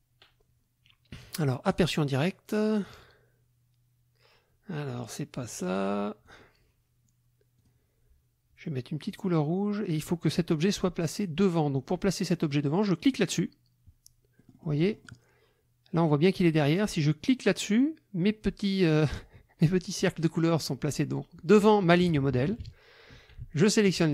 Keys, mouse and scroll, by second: 1.7 click, 5.6 click, 6.2 click, 7.6 click, 9.1 click, 14.4 click, 17.3 click, 21.9 KP_Subtract, 23.7 shift+click.